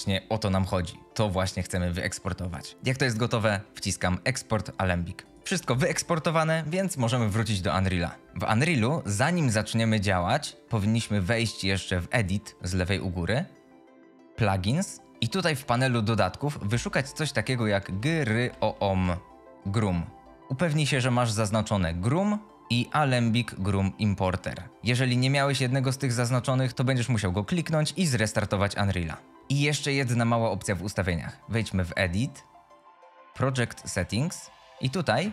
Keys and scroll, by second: 5.4 F22, 8.1-8.8 typing.